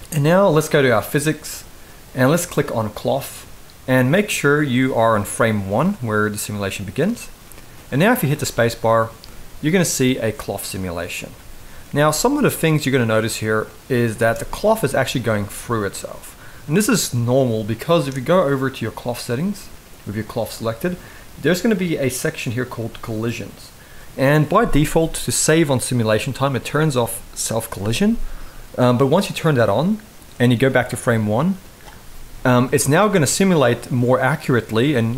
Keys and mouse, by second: 2.5 click, 4.3 click, 5.3-6.7 drag, 7.1-7.8 middle drag, 8.0 space, 13.8 space, 14.0-14.4 middle drag, 14.7 shift+middle drag, 15.7-16.9 middle drag, 22.3 click, 29.0 click, 30.4-31.5 drag, 32.1 middle click.